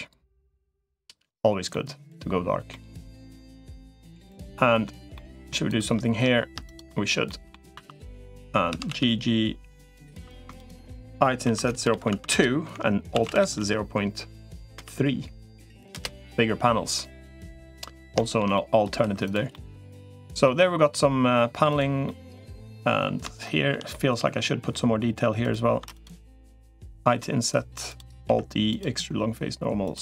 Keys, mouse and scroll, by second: 1.5 middle click, 2.5 middle click, 3.3 middle click, 4.1 middle click, 4.9 middle click, 5.5 click, 7.1 middle click, 7.7 2, 7.9 click, 8.5 g, 10.1 3, 10.3 shift+click, 11.3 i, 12.9 alt+s, 16.7 middle click, 17.9 shift+middle click, 18.9 3, 19.3 middle click, 19.7 middle click, 21.5 click, 21.8 middle click, 22.5 middle click, 23.2 shift+middle click, 23.7 middle click, 26.9 i, 28.1 alt+e.